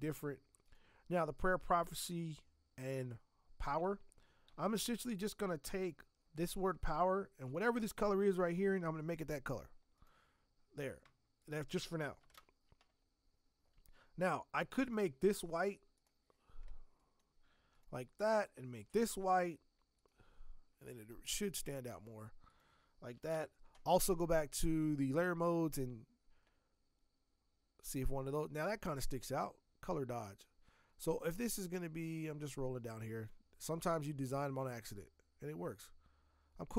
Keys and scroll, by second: 4.5 t, 12.3 ctrl+Return, 23.2 ctrl+Return.